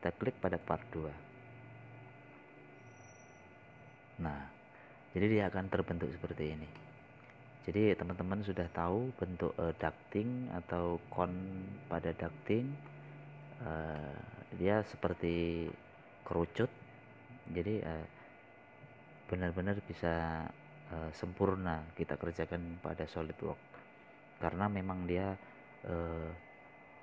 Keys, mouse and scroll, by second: 0.8 click, 8.1-8.4 scroll down 2, 9.8 middle click, 11.4 scroll up 1, 12.1 scroll down 1, 12.9-16.1 middle drag, 16.1 scroll up 1, 17.0-19.2 middle drag, 19.2 scroll down 1.